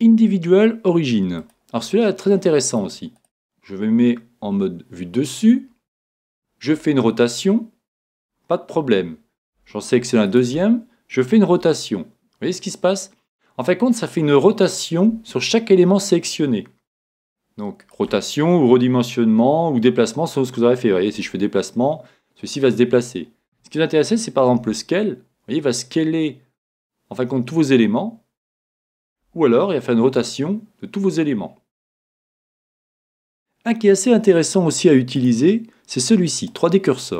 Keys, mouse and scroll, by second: 2.3-4.0 middle drag, 3.1 right click, 4.4 KP_7, 6.7 r, 10.2 right click, 11.5 r, 17.1-19.6 right drag, 19.7 right click, 21.1 g, 24.5 s, 30.0 r, 35.1-36.9 drag.